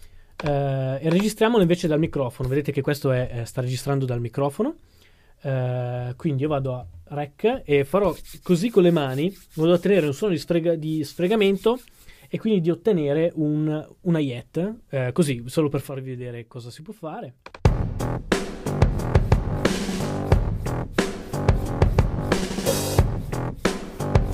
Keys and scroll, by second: 0.0-0.2 typing.